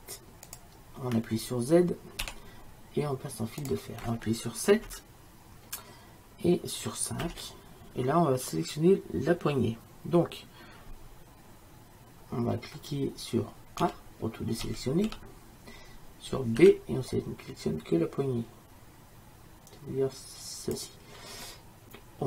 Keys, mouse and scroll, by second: 2.3 z, 5.0 KP_7, 7.3 KP_5, 13.9 a, 14.7 a, 15.2 a, 16.7 b.